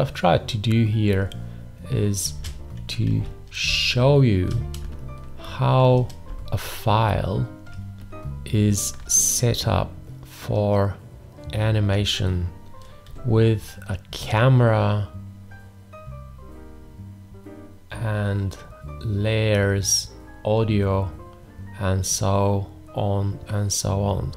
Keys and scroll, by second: 2.4 space, 3.1 ctrl+a, 3.7 space, 6.3 ctrl+space, 7.8 ctrl+space.